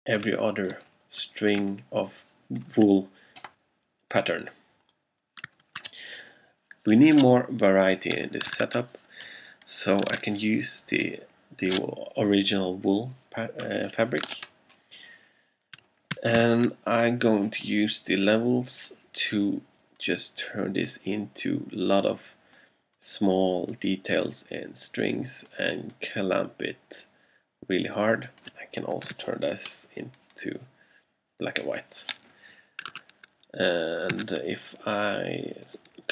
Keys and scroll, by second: 0.3 alt+space, 1.7 alt+space, 2.5 space, 3.6 alt+space, 4.1 space, 6.6 super+Tab, 8.6 super+Tab, 10.2 super+Tab, 16.5 alt+super+l, 29.1 super+u, 33.0 super+a, 34.2 super+c.